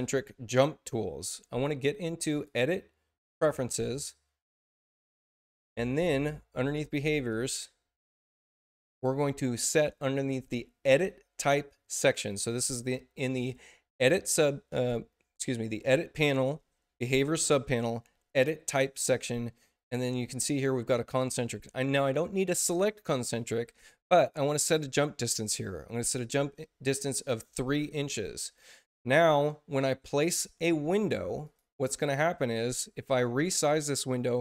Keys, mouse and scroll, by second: 2.2 click, 3.2 click, 7.2 click, 24.0 click, 28.2 click, 31.4 click, 32.4 click, 33.2 click.